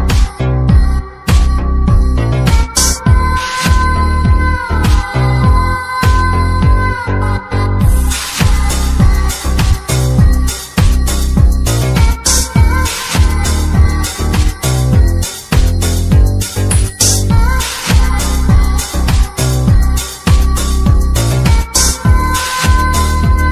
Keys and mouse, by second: 0.5 shift+a, 3.4 shift+a, 7.5-8.1 typing, 9.5 y, 10.5 click, 12.4 click, 12.7-13.0 middle drag, 14.2 shift+a, 16.4-17.3 drag, 17.5-17.9 drag, 18.1 typing, 21.7 typing.